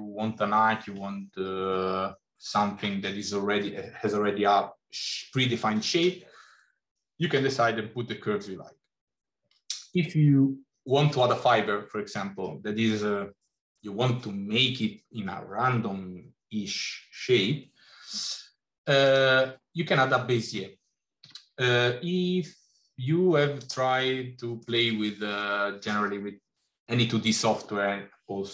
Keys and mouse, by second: 21.0 g, 24.0 middle click.